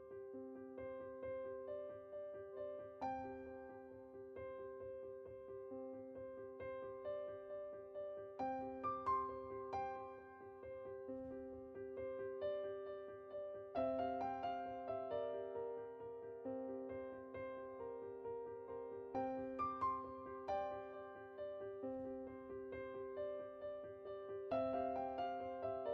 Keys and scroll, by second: 5.5 Tab, 6.1 Tab, 20.5-21.9 typing.